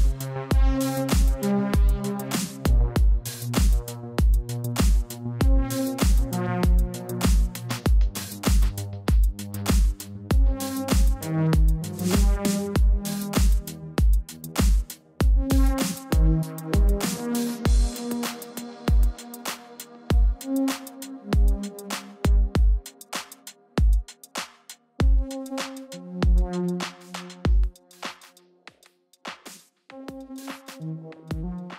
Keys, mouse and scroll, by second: 1.7 click, 5.1 click, 8.6 click, 13.4-13.9 scroll down 1, 14.1 click, 16.9 click, 19.2 click, 24.9 click.